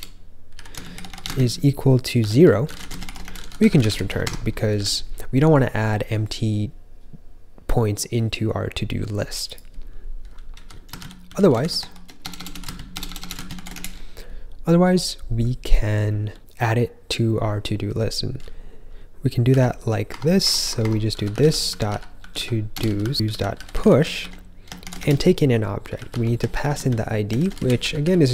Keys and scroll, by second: 0.2-4.7 typing, 10.2-12.9 typing, 14.5-15.3 typing, 19.4 i, 20.0 Tab, 20.3 Tab, 20.6 Tab, 20.7 Tab, 21.0-28.3 typing.